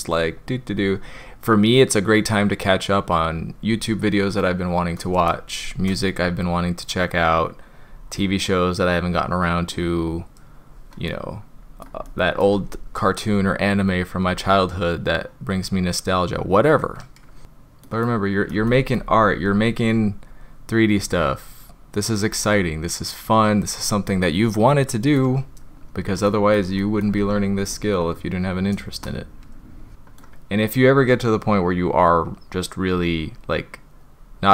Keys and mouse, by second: 0.7-3.2 drag, 4.4-5.0 middle drag, 6.7-7.8 drag, 7.9-8.9 drag, 9.1-9.9 drag, 11.1-11.8 middle drag, 12.1-12.4 shift+middle drag, 14.3-15.4 drag, 15.6-16.4 drag, 17.4 middle click, 18.0-18.5 middle drag, 18.7 shift+middle drag, 21.0-22.3 drag, 22.4-23.2 drag, 24.3-25.2 middle drag, 26.3 middle click, 26.8 shift+middle drag, 29.1 click, 29.9 middle click, 31.7-32.9 drag, 33.1-33.9 drag, 34.2-34.5 drag.